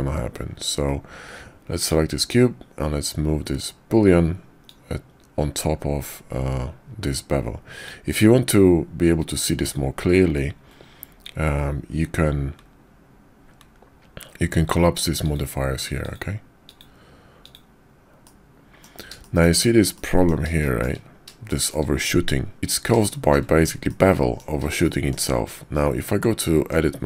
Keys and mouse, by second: 1.8 click, 4.7-7.9 drag, 15.3 click, 16.1 click, 16.7 click, 18.2-18.9 middle drag, 19.2 shift+click, 20.0-20.3 drag, 20.6 shift+drag, 21.5 shift+drag, 23.1 shift+middle click, 23.9-24.4 middle drag, 24.8-25.1 shift+middle drag, 26.5 Tab.